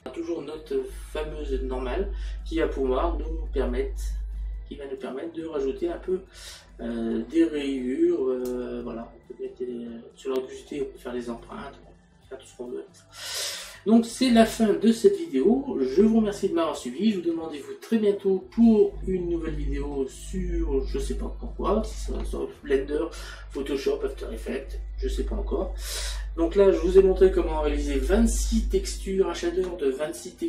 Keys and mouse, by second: 2.6 middle click, 7.8 middle click, 19.0 middle click, 21.1 middle click.